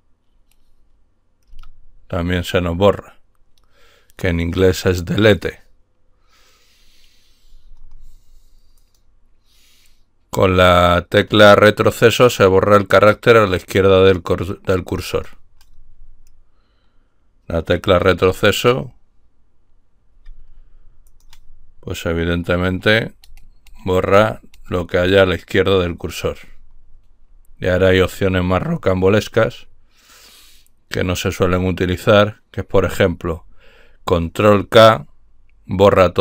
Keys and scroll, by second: 1.5 Delete.